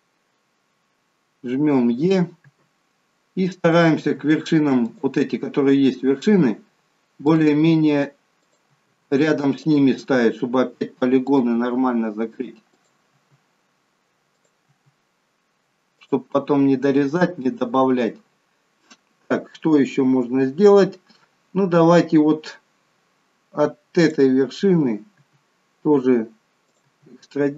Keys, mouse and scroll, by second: 2.4 e, 4.0 e, 7.4 e, 8.7 e, 9.9 e, 11.5 e, 13.1 e, 14.6 e, 24.0 click, 25.1 e, 26.8 e.